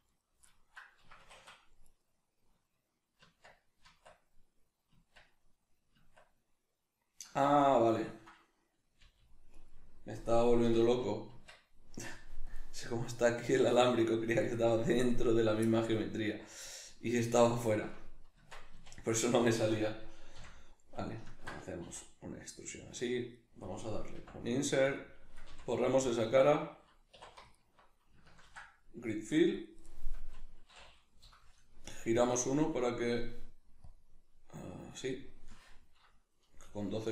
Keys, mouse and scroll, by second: 0.1 right click, 0.5 middle click, 1.0 Escape, 1.9 right click, 3.2 Tab, 7.6 ctrl+middle click, 9.0-12.5 middle drag, 9.0 g, 9.6 right click, 10.6 o, 11.3 Tab, 12.5-15.1 drag, 15.1 right click, 15.7-18.4 middle drag, 18.4 Tab, 18.7 a, 19.1-20.4 middle drag, 20.4 f, 20.7-21.9 middle drag, 21.9 e, 23.2 click, 23.3 middle click, 24.1 i, 25.0 click, 25.5 x, 27.1 2, 27.5 alt+right click, 28.5 ctrl+f, 29.9-31.2 middle drag, 31.2 F9, 35.7-37.1 middle drag.